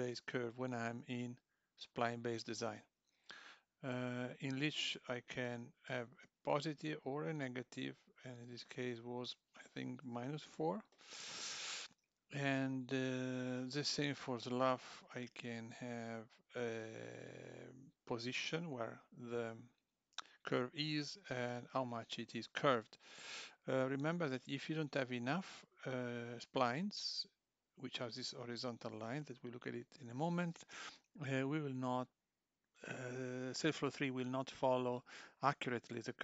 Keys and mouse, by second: 5.5 click, 9.2 click.